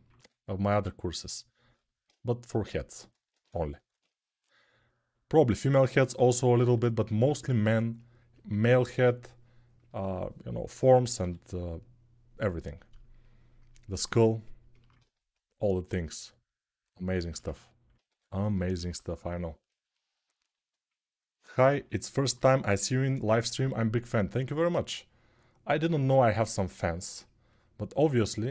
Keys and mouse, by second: 8.5 1, 10.9 g, 16.9-21.1 alt+shift+right drag, 17.8 2, 18.5 [, 18.7 [, 19.0 [, 21.1-28.5 ctrl+alt+drag, 25.5 1.